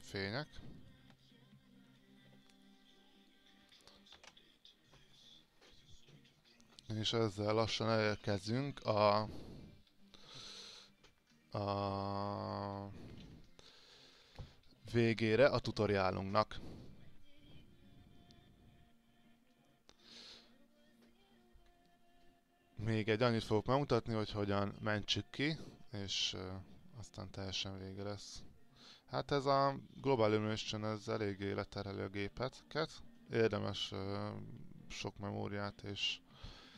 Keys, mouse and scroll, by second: 0.3 click, 1.4 alt+click, 3.2 click, 4.3 ctrl+r.